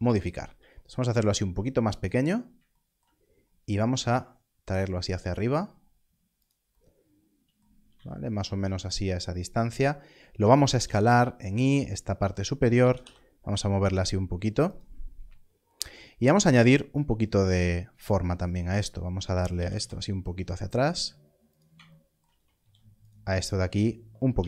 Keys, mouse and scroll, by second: 2.0 click, 3.1-3.9 scroll down 1, 3.9 e, 6.3 e, 7.9 z, 8.7 click, 12.4 click, 12.9 y, 14.6 click, 15.1 scroll up 1, 16.5 ctrl+r, 18.4 click, 19.7 g, 19.7 y, 21.5 click, 22.5 ctrl+r, 23.4 right click.